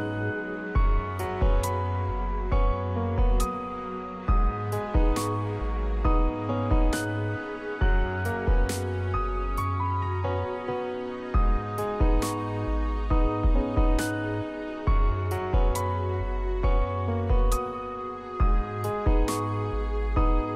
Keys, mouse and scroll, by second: 10.6 v, 11.1 v, 11.3 v.